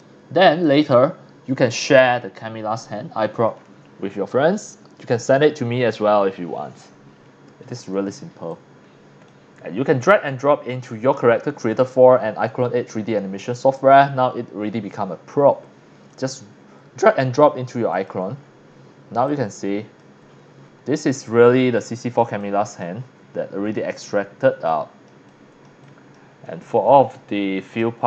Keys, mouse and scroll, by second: 0.6 click, 8.5-9.2 drag, 11.7 click, 16.1 click, 17.9 click, 18.4-18.9 scroll up 2, 19.2 x, 19.3-20.0 drag, 20.3-20.7 scroll up 3, 20.9 scroll down 2, 21.5 x, 21.6 click, 22.4 click, 23.0 scroll down 1, 23.4 c, 23.8 middle click, 23.8 scroll up 1, 24.3 scroll down 1, 24.5 c, 24.7-25.0 drag, 25.3 click, 25.8 click, 26.6 x, 26.8 scroll up 2, 27.5 scroll down 1, 27.7 x, 27.8-28.0 drag.